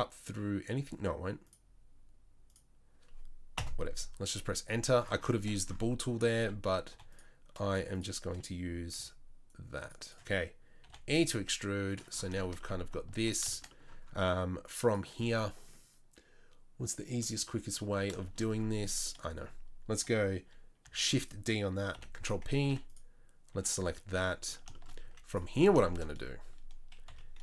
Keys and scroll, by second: 6.9 3, 9.0 c, 10.9 e, 13.2 Tab, 18.8 Tab, 20.9 shift+d, 21.9 p, 22.7 Tab, 23.5 Tab, 25.0 z, 27.1 KP_3.